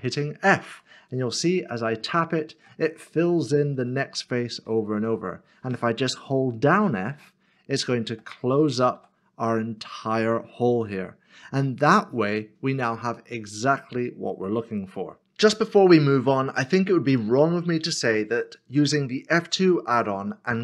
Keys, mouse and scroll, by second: 0.7 f, 1.3 f, 2.0 f, 3.2-5.0 typing, 7.1 f, 8.6 f, 9.0 f, 11.7 middle click, 13.2 scroll down 1, 14.0 middle click.